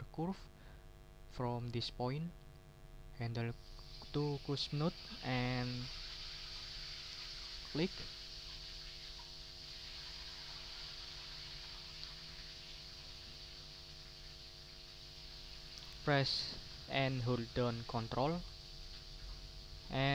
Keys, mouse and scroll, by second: 0.2 click, 1.3 ctrl+right click, 1.7-2.1 ctrl+scroll up 2, 7.5 click, 8.4 ctrl+scroll down 2.